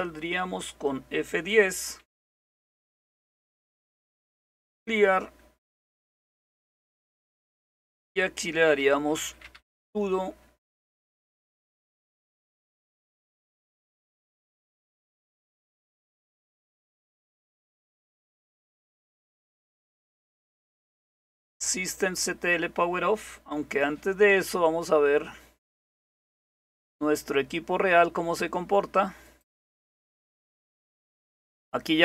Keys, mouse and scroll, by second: 1.8-3.0 typing, 4.2 Return, 9.0-10.1 typing, 11.4-21.7 typing, 26.6 click, 29.3 click, 30.2 click.